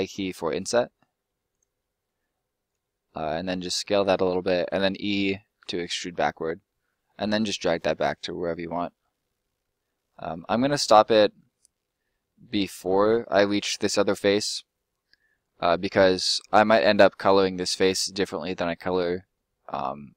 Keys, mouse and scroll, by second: 1.5 click, 1.7 middle click, 4.7 e, 10.7 right click, 11.0 middle click, 12.5 click, 13.6 middle click, 18.7 middle click.